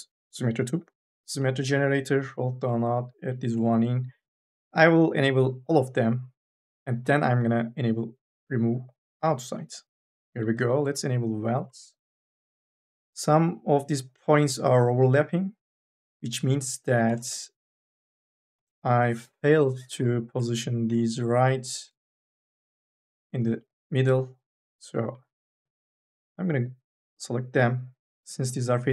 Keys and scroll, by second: 16.7 1, 16.9 space, 19.4 KP_0.